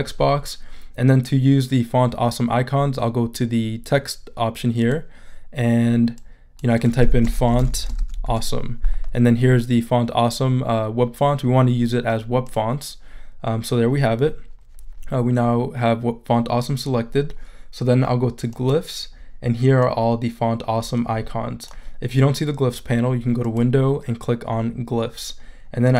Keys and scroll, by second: 7.0-8.7 typing.